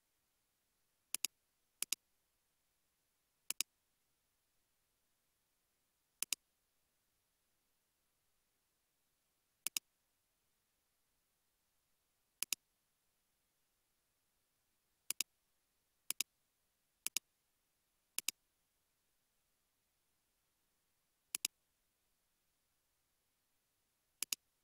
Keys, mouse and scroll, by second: 0.2-0.9 scroll up 1, 0.9 scroll, 1.0-4.1 typing, 5.0 scroll up 1, 5.9-6.6 scroll down 1, 7.3 scroll down 1, 8.2-10.0 scroll down 1, 10.0 scroll down 1, 10.6 scroll down 1, 10.8 typing, 19.5 typing, 19.6 Return, 22.2 1, 22.9 Return.